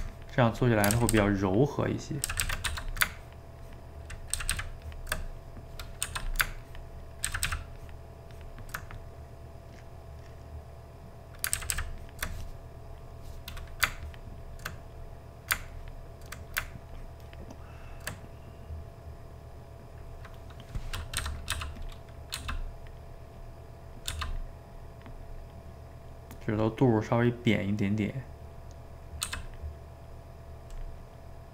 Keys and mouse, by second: 0.1 click, 1.0 ctrl+z, 1.1 ctrl+z, 1.4 ctrl+click, 2.3 ctrl+z, 2.4 ctrl+z, 2.7 f, 3.2-4.4 ctrl+drag, 4.4 ctrl+z, 4.5 ctrl+z, 4.8-6.0 ctrl+drag, 6.0 f, 6.6 ctrl+click, 7.3 ctrl+z, 7.5 ctrl+z, 7.8-8.9 ctrl+drag, 8.9-11.6 middle drag, 11.6 ctrl+z, 11.7 ctrl+z, 12.0-14.8 ctrl+drag, 14.8 middle click, 15.7 ctrl+click, 16.4 middle click, 16.9-18.2 ctrl+drag, 18.2-21.3 middle drag, 21.3 g, 21.5 f, 22.0 middle click, 22.4 f, 22.8 middle click, 23.4 click, 23.9 middle click, 24.1 f, 24.7 click, 25.6 middle click, 26.1 click, 27.0-28.0 middle drag, 28.0-29.3 drag, 29.3 f, 29.7 middle click, 30.1 click, 31.0 middle click.